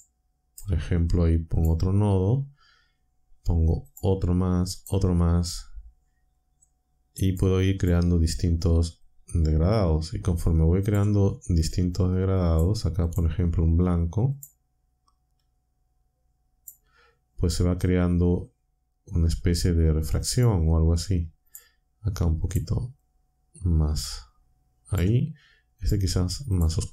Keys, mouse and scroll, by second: 1.6 click, 3.9 click, 4.8 click, 6.6-7.5 drag, 7.8 click, 9.0-11.1 drag, 11.7-12.7 drag, 13.0 click, 14.3 click, 15.4-16.8 drag, 19.4-20.5 drag, 21.5 click, 22.4 click, 23.0-25.1 drag, 25.8 click, 26.5 click.